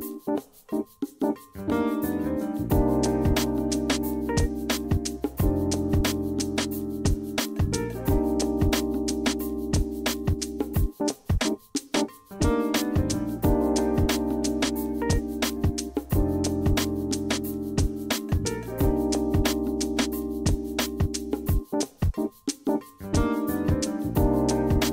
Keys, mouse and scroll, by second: 1.4 q, 3.0 e, 3.8 q, 4.4 e, 5.8-10.6 middle drag, 11.4 click, 12.5 click, 13.5 click, 16.9 a, 19.3 d, 21.2 a, 23.9 d.